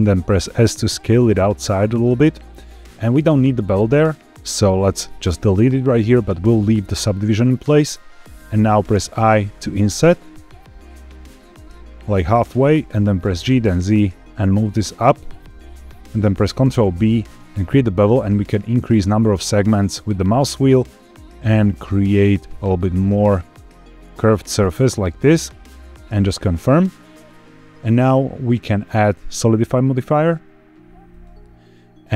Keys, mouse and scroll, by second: 1.9 click, 1.9 s, 5.1 click, 8.9 i, 12.4 click, 13.1 g, 13.4 z, 15.0 click, 15.3 middle click, 16.5 ctrl+b, 18.1-18.5 scroll up 1, 18.8-19.5 scroll up 1, 20.9-23.1 scroll up 1, 23.1 scroll up 1, 26.0 click, 28.8-31.2 drag.